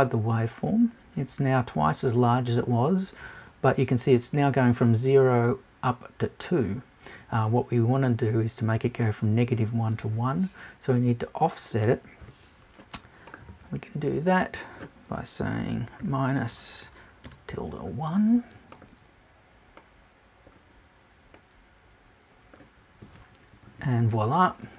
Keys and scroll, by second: 12.2 BackSpace.